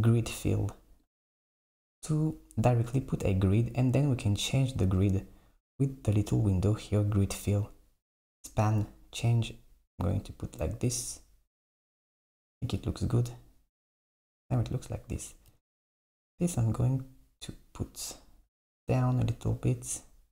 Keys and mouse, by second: 8.5-12.1 drag, 12.1 Tab, 14.6 Tab, 15.5 g.